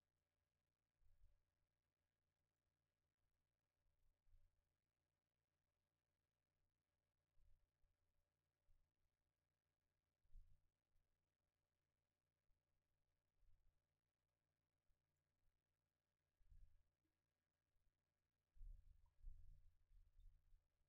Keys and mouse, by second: 0.3-2.5 drag, 4.6-6.7 drag, 6.0-8.3 middle drag, 8.3-14.9 drag, 15.8-18.9 drag, 16.3-20.1 middle drag, 18.9 KP_1.